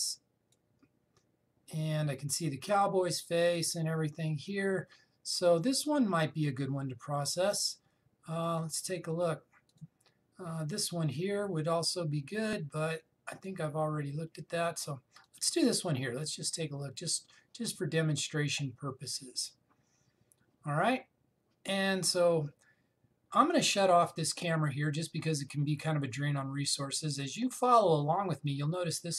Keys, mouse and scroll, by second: 0.4-3.7 drag, 9.0-10.4 scroll down 1, 10.4 click, 14.0 click, 15.3-15.9 scroll up 1, 15.9 click, 17.5-18.9 scroll up 1, 21.8-23.6 scroll down 1, 25.3 click, 28.7 click.